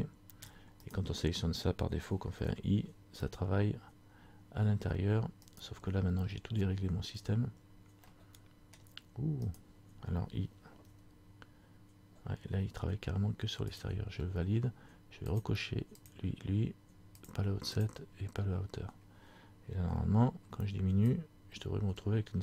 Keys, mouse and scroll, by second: 0.6 scroll down 1, 1.0 right click, 2.5 i, 8.2 scroll up 1, 8.3 middle click, 9.7 right click, 11.0 i, 15.5 click, 16.2 click, 17.3 click, 18.0 click.